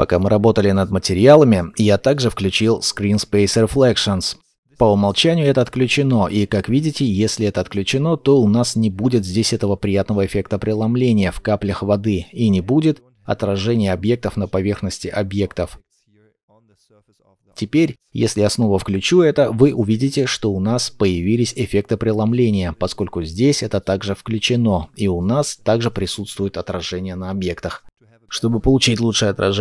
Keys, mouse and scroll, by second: 7.8-10.6 scroll up 1, 12.4 shift+middle click, 12.4-13.0 scroll up 1, 13.0 shift+middle click, 25.9-27.4 scroll up 1, 27.4 scroll up 1, 27.5-28.0 scroll down 1.